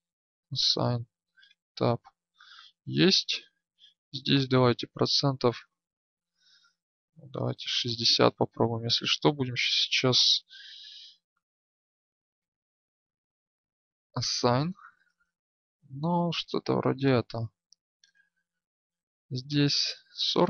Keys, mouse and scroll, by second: 1.4 Tab, 3.1 Tab, 5.4 right click, 14.7 Tab, 14.7-16.2 drag, 16.2 Tab, 18.3 right click.